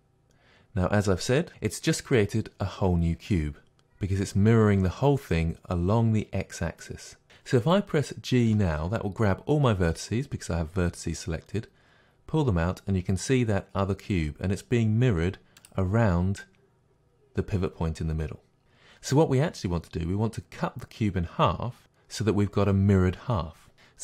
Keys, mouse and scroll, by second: 8.5 g, 15.6-18.7 middle drag.